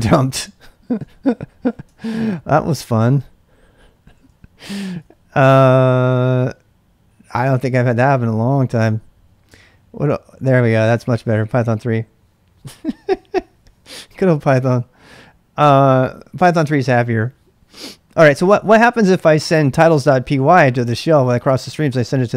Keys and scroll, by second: 1.1-5.4 typing, 1.9 ctrl+[, 4.9 ctrl+[, 9.5 Return, 18.4 ctrl+[, 18.5-21.4 typing.